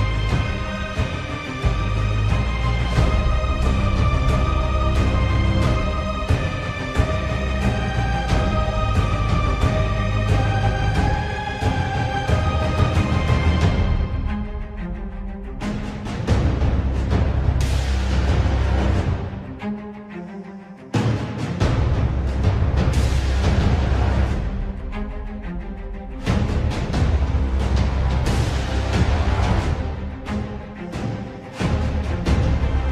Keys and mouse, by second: 1.2 middle click, 3.3 KP_7, 4.7 middle click, 5.8 middle click, 8.9 2, 10.6 alt+click, 14.1 middle click, 17.1 KP_7, 18.6 g, 23.3 middle click, 24.4 middle click, 24.9 3, 26.6 KP_7, 28.9 s.